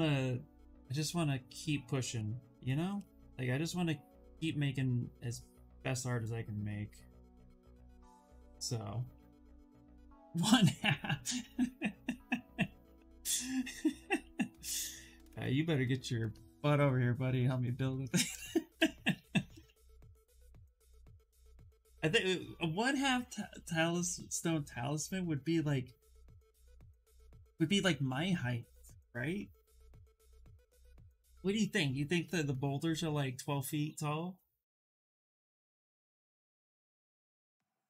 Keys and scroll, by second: 19.2 ctrl+z, 19.5 ctrl+z.